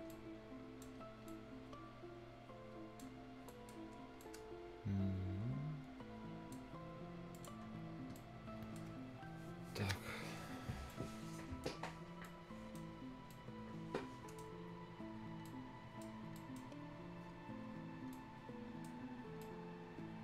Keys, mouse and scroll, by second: 0.1 right click, 1.3-3.1 right drag, 3.1 scroll down 1, 3.3 scroll up 1, 3.5 right click, 3.8 scroll down 1, 4.2 scroll up 1, 4.2-7.4 right drag, 7.4 click, 7.7 scroll down 1, 7.9 scroll up 1, 8.2 right click, 8.9 scroll down 1, 10.7 scroll up 1, 10.9 right click, 11.7 scroll down 1, 12.0 scroll up 1, 12.3 right click, 12.9-13.2 scroll up 1, 13.3-15.3 right drag, 15.3 scroll down 1, 15.5 right click, 16.9 scroll down 1, 17.5 scroll down 1, 18.1 right click, 19.0-19.4 scroll up 1, 19.7-20.2 right drag.